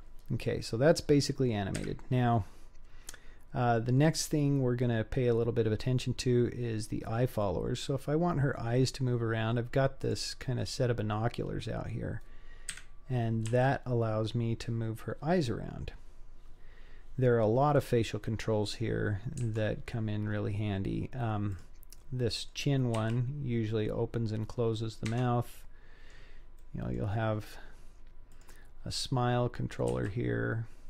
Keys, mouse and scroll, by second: 0.3-1.0 scroll down 3, 1.0-1.8 scroll up 2, 1.8 scroll up 1, 1.8 KP_1, 6.6-7.5 scroll up 3, 7.5-8.0 middle drag, 9.1-10.0 scroll down 2, 10.0 click, 10.6-11.3 scroll up 2, 11.3 scroll down 1, 11.4-12.7 scroll down 4, 12.7 KP_1, 13.5 g, 20.2-21.5 scroll up 2, 21.5 click, 22.0-22.5 middle drag, 22.9 r, 25.5-26.1 middle drag, 26.6 middle click, 27.3-28.3 scroll up 3, 28.3 click, 28.8-29.9 scroll down 2, 29.9 r.